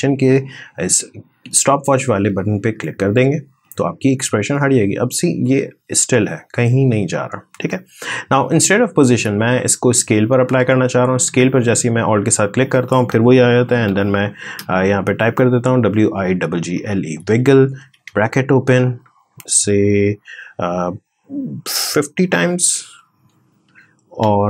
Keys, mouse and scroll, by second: 9.6-11.0 drag, 13.1-14.3 typing, 15.5-17.5 typing, 22.4-24.0 typing.